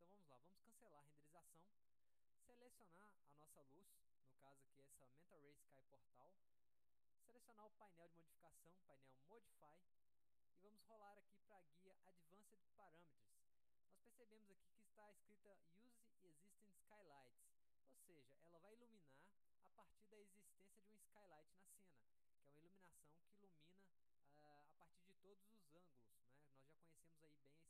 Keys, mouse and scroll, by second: 1.1 click, 3.6 drag, 4.0 middle click, 4.2 scroll down 1, 5.2 click, 5.9 middle click, 6.0 scroll up 1, 8.9 click, 13.1 click.